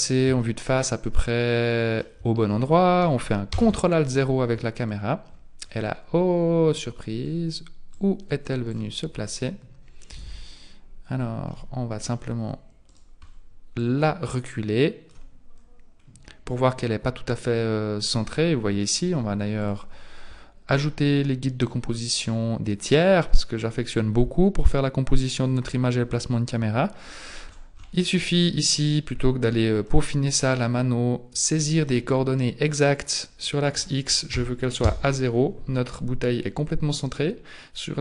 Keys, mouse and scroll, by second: 0.5 shift+middle click, 0.5-0.9 scroll up 1, 3.5 ctrl+alt+KP_0, 5.1-5.9 scroll down 1, 5.9-6.7 scroll down 2, 7.9 click, 10.1 t, 10.2 n, 10.6-11.3 scroll down 3, 11.1 scroll up 1, 11.5 middle click, 12.1-12.9 scroll down 1, 12.9 right click, 12.9-13.8 scroll down 2, 13.8 click, 13.8-14.3 scroll down 1, 15.5-16.1 scroll up 4, 17.3-19.6 scroll up 2, 19.6 click, 20.7 click, 27.1-29.5 scroll up 18, 29.5 middle click, 29.5-30.5 scroll up 5, 30.5 click, 33.4 click.